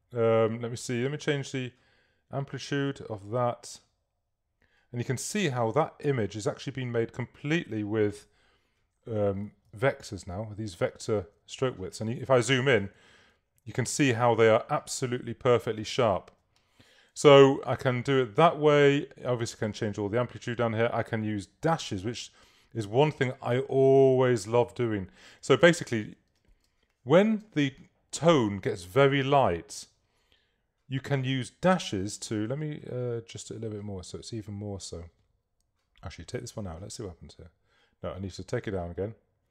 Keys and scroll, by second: 9.8 super++, 13.0 super++, 13.4 super+-, 26.7 super+space.